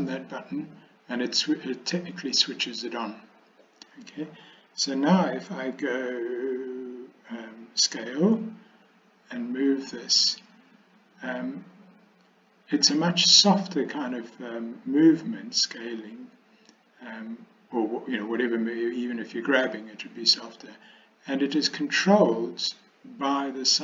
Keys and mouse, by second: 8.0 s.